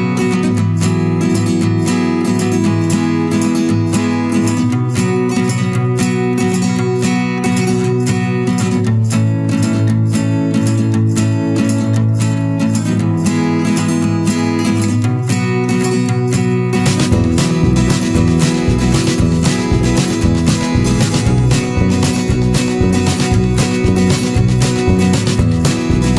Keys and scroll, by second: 4.7 ctrl+=, 13.1 ctrl+-, 21.7 ctrl+=, 24.7 ctrl+=.